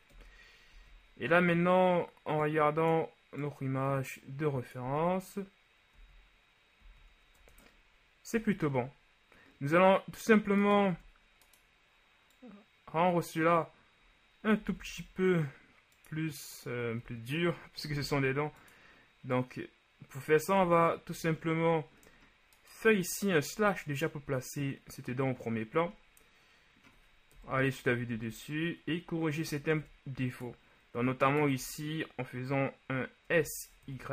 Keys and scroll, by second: 0.3 KP_1, 0.8 z, 5.0 z, 7.4 Tab, 8.4 a, 11.1 Tab, 14.8 s, 15.0 z, 18.1 s, 18.2 z, 21.2 a, 23.7 KP_Divide, 27.5 KP_7, 28.2 Tab, 29.8 ctrl+Tab, 33.4 s, 34.0 y.